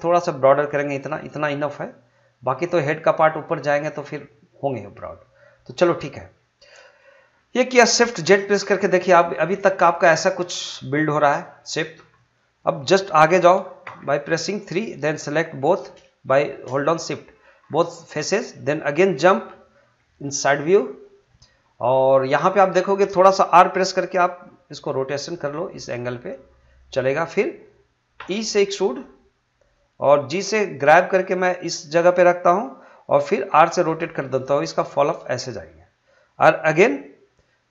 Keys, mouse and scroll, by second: 0.9 click, 4.9-6.7 middle drag, 6.7 scroll down 1, 7.0 middle click, 7.3 scroll up 1, 7.6 middle click, 8.2 shift+z, 8.6-11.5 middle drag, 11.5-11.8 scroll up 1, 11.8 middle click, 13.8 3, 14.8 click, 16.2 shift+click, 16.8-17.1 scroll down 1, 17.1 middle click, 17.6 scroll down 1, 17.8 middle click, 24.8 r, 26.7 click, 28.2 e, 29.6 click, 30.3 g, 31.7 click, 33.5 r, 35.3 click.